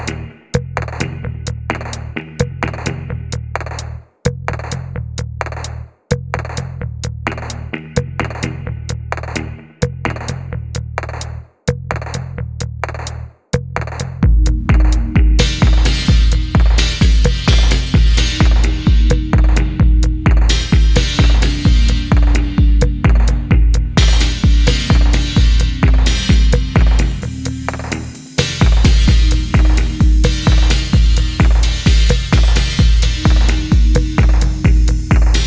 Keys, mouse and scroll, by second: 5.0 F4, 5.5-7.2 scroll down 1, 7.2-8.5 typing, 7.4-8.0 scroll up 1, 11.4-12.1 typing, 12.3 F1, 12.6 middle click, 12.9-13.9 scroll up 1, 13.9 middle click, 14.2-14.7 scroll up 1, 14.7-16.1 scroll, 16.1-17.6 scroll down 1, 17.9 shift+middle click, 18.1 shift+middle click, 19.6 double click, 20.2 ctrl+click, 20.8 typing, 21.8 middle click, 22.7 middle click, 23.0-23.4 shift+scroll up 4, 23.4 middle click, 24.5-24.9 scroll down 1, 25.0 middle click, 25.2 scroll down 1, 25.4 middle click, 26.0 shift+scroll down 1, 27.1-28.7 scroll up 1, 32.1 middle click, 33.9 double click.